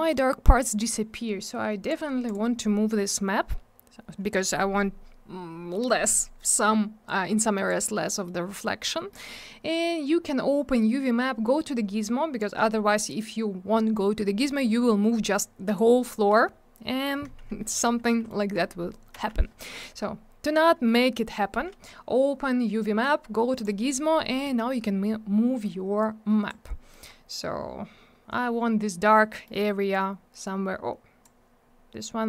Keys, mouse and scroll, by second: 0.0-0.4 scroll down 1, 1.8 click, 1.9 click, 2.2 click, 2.3 double click, 7.0 click, 8.0 middle click, 8.2 middle click, 8.4 scroll down 1, 9.1 middle click, 12.4 click, 12.4 click, 14.4 middle click, 14.5 middle click, 15.2 click, 18.1 middle click, 19.1 ctrl+z, 19.6 middle click, 19.8 middle click, 23.5 click, 23.6 click, 26.0 click, 26.9 middle click, 27.0 middle click, 29.3 middle click, 29.4 middle click, 29.9 click.